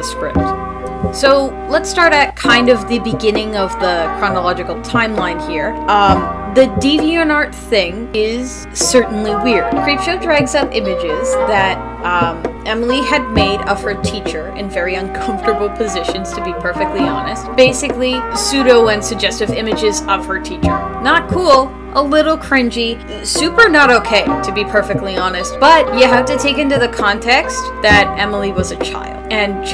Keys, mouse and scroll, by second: 3.8 space, 5.3 space, 7.3 space, 8.1 space, 8.3 space, 10.8 space, 13.6 space, 13.8 ctrl+z, 18.9 [, 20.5 [.